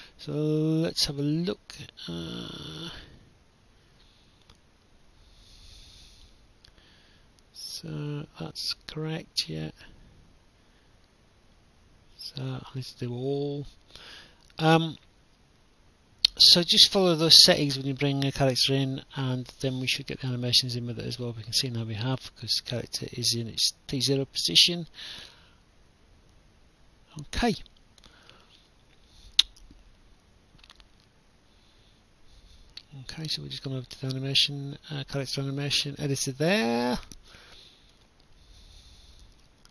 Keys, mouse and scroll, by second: 6.7 click, 9.2 click, 11.3 click, 12.6 click, 17.1 click, 19.5 click, 20.3 right click, 20.4-22.4 typing, 22.9 click, 23.3 right click, 25.0 Escape, 25.5 right click, 26.2 w, 26.4 w, 27.2 click, 27.7 shift+click, 30.4 click, 33.1 click, 36.2 click, 39.0 click.